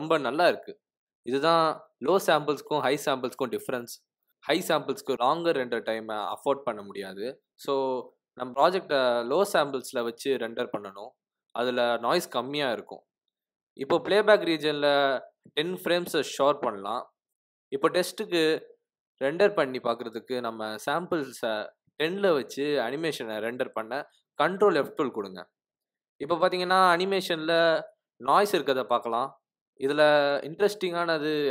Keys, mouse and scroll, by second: 11.9 click, 13.5 click, 13.7 click, 13.8 g, 14.5 shift+Right, 14.7 g, 14.8 r, 15.7 click, 18.3 ctrl+F12, 21.8 click.